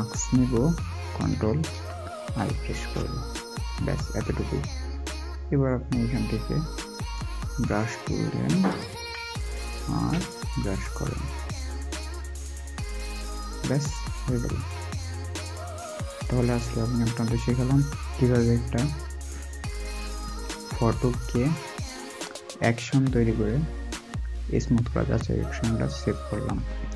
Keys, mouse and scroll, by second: 1.1 typing, 2.3 ctrl+i, 6.9 ctrl+i, 6.9 right click, 9.2 alt+scroll up 1, 15.8 alt+scroll, 15.9-16.7 alt+scroll down 1.